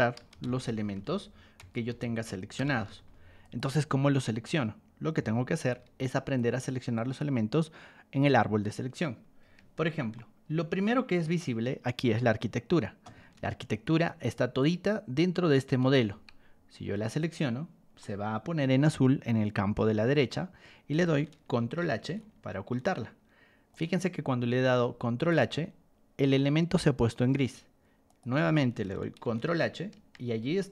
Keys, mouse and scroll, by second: 0.0-3.3 typing, 3.4 click, 5.1 r, 6.3 ctrl+click, 9.4 Escape, 10.1-11.2 shift+middle drag, 13.3 ctrl+1, 13.7 click, 14.6-15.9 ctrl+drag, 17.2 click, 18.0-19.5 shift+middle drag, 21.8 ctrl+h, 23.7 click, 24.7 ctrl+1, 25.1 click, 27.3 Escape, 28.0 click, 29.2 ctrl+h, 29.9 Escape.